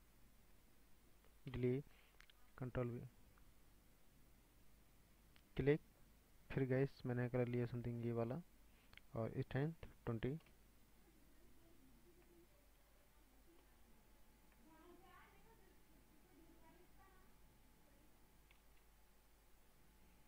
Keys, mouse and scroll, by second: 0.7 click, 1.5 Delete, 2.5 ctrl+v, 4.6 click, 5.2-7.4 drag, 10.5 click, 11.5 scroll down 4, 12.3-13.0 shift+middle drag, 13.0-13.9 scroll up 3, 13.6-16.7 drag, 14.6-16.6 shift+middle drag, 17.8 click, 18.8 ctrl+z.